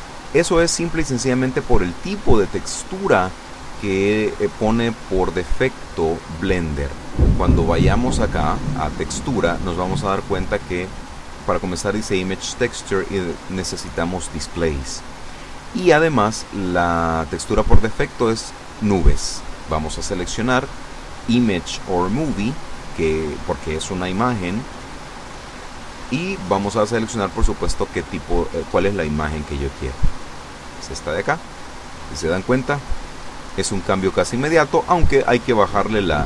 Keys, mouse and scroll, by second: 0.0-1.2 drag, 1.9 click, 4.1 click, 8.6 click, 11.6 click, 14.7 click, 19.2 click, 26.2 click, 29.4 click, 31.3 click, 35.3 click.